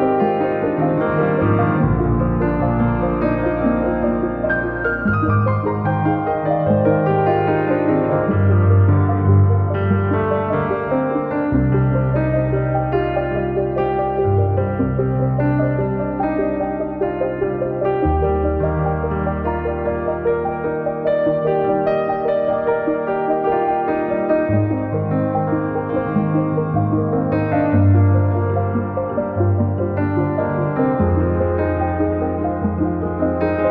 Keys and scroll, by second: 0.3 Escape, 3.8 r, 5.6 space, 8.8 space, 8.9 Escape, 15.7 space, 15.9 Escape, 20.5 b, 20.9 space, 21.1 Escape, 28.7 q.